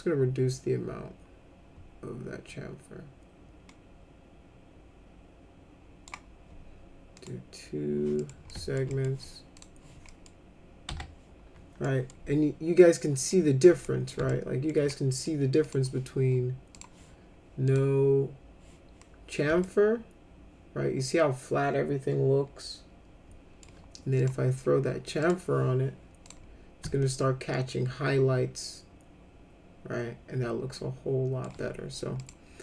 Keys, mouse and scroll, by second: 7.2 click, 8.2 middle click, 8.5 alt+middle click, 8.9 middle click, 9.6 click, 10.1 middle click, 10.9 F4, 11.9 middle click, 13.3 middle click, 13.8 middle click, 14.3 alt+middle click, 14.9 middle click, 15.7 click, 16.7 click, 17.7 click, 19.6-23.6 alt+middle drag, 24.2 click, 25.2 click, 26.2 click, 27.0-31.4 alt+middle drag, 32.2 click.